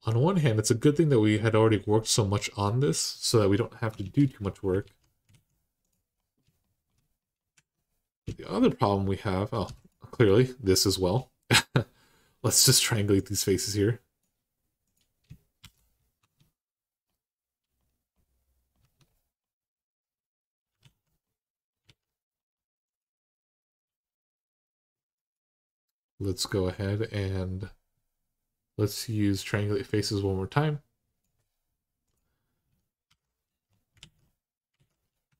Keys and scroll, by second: 3.7 Tab, 4.6 alt+z, 5.1 alt+z, 7.3 Tab, 9.4 3, 15.4 r, 16.0 Tab, 18.6 Tab, 20.6 alt+z, 21.6 alt+z, 32.9 r, 33.8 alt+z, 34.6 alt+z, 35.1 2.